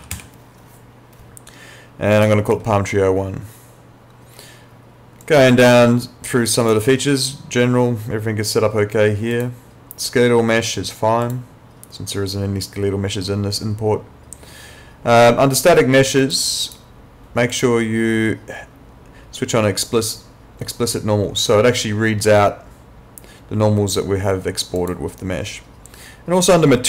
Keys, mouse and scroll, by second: 0.0-0.1 typing, 2.2 click, 5.2 click, 9.3 click, 16.2 click, 24.8 click.